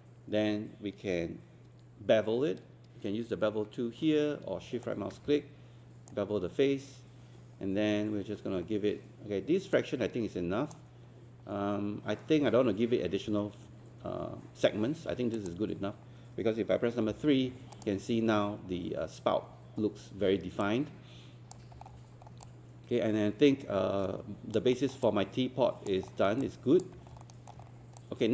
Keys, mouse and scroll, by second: 25.0 alt+click.